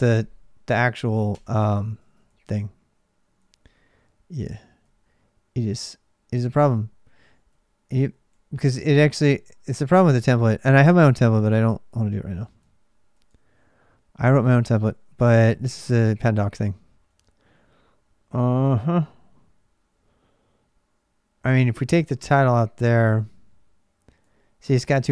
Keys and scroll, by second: 1.1 Return, 1.8 ctrl+[, 1.8 ctrl+j, 3.2 j, 4.3-7.3 typing, 14.2-15.7 typing, 18.4-19.3 typing, 21.5 k, 24.0 j.